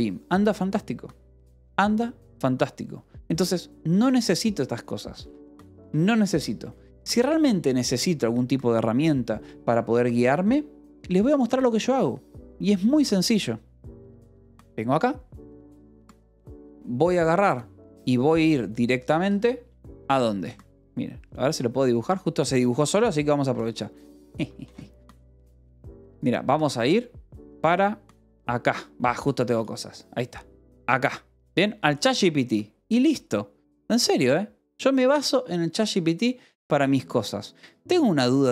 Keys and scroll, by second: 1.9 ctrl+s, 4.9-7.3 typing, 21.8 ctrl+z, 23.9 ctrl+x, 24.8 ctrl+z.